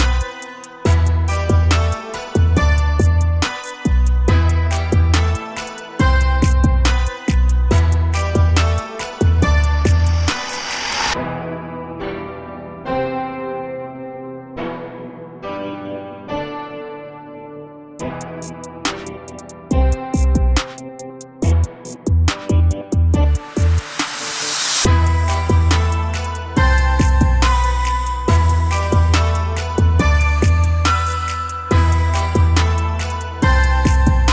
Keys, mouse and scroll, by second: 2.0 a, 6.3 shift+a, 9.1-12.4 drag, 12.4 s, 14.4 s, 17.5 KP_7, 18.1-18.9 scroll down 10, 18.9 g, 20.8 KP_0, 21.7 g, 22.5-22.9 scroll down 1, 22.9 a, 23.1 a, 24.1 click, 24.5 g, 25.7 g, 26.9 a, 27.1 a, 27.6-28.3 middle drag, 28.3-28.8 scroll down 2, 28.8 KP_0, 29.3 a, 29.5 a, 29.9-31.3 scroll up 1, 31.3 click.